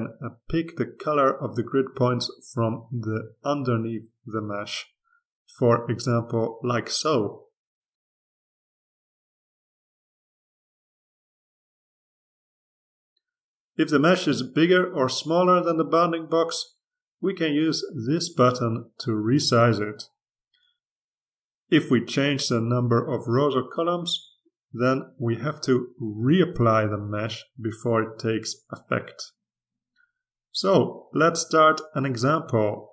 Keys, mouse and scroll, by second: 1.6 click, 2.5-5.1 drag, 6.2 click, 7.7 click, 10.7 click, 12.1 click, 16.5 click, 19.6 click, 23.5-24.6 drag, 24.7 2, 25.6-26.8 drag, 26.4 3, 28.4 click, 29.7 click.